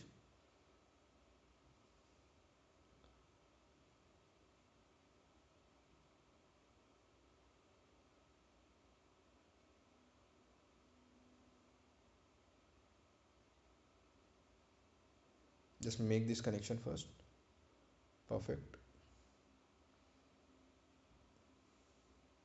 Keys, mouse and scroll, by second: 10.0 ctrl+click, 11.6 ctrl+click, 15.8 click, 20.6 click, 21.2 right click.